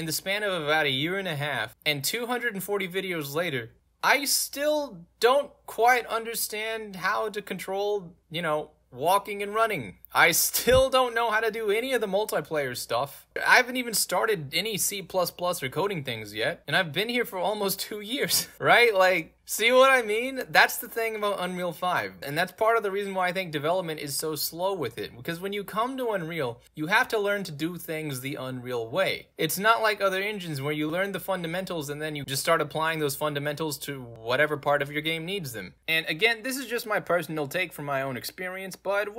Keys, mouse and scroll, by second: 8.4 space, 11.0 d, 11.3 space, 12.5 a, 13.7-16.2 typing, 16.6-35.8 middle drag.